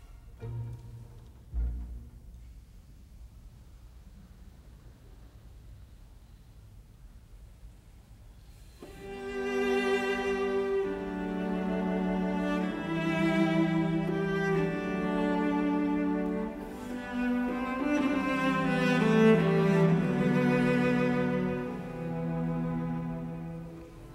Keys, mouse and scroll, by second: 5.5 b, 5.7 space, 6.6 KP_Subtract, 8.0 Return, 8.9 Delete, 10.2 f, 10.3 space, 12.2 space.